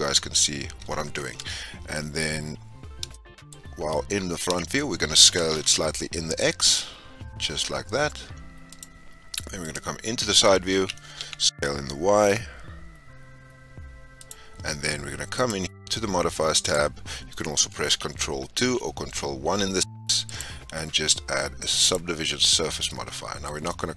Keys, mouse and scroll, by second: 1.3 n, 2.5-3.1 scroll down 1, 3.1-3.5 shift+middle drag, 3.5-4.1 scroll up 4, 4.2-4.5 scroll down 2, 4.5-5.2 shift+middle drag, 5.2 s, 9.6 click, 10.7 s, 15.3 click, 17.2-19.6 drag, 21.9 click, 22.6 scroll down 2, 22.8-23.9 middle drag.